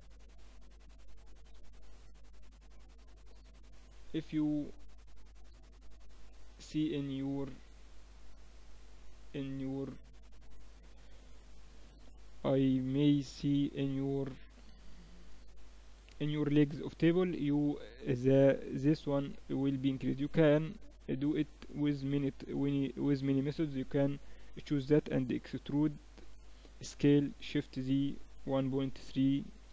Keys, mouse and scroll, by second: 0.7-3.3 middle drag, 1.8 Tab, 3.2 Tab, 3.8-6.7 drag, 5.8 shift+b, 7.6 Tab, 8.8 a, 9.4 a, 9.7 a, 10.2-12.0 drag, 13.5-15.4 right drag, 25.6 e.